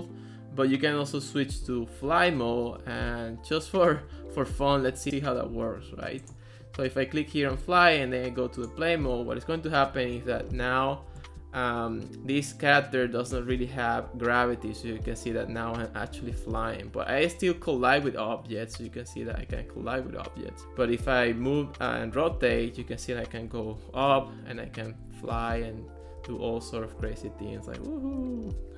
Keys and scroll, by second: 10.6 a, 11.1 w, 14.5 Left, 15.8 w, 17.6 Down, 18.8 w, 19.6 Down, 20.2 Up, 20.8 w, 22.1 Up, 22.4 w, 23.0 Down, 23.5 w, 24.2 Left, 24.7 w, 25.1 Down, 25.6 Up, 26.2 w, 26.5 Left, 28.2 w, 28.4 Down.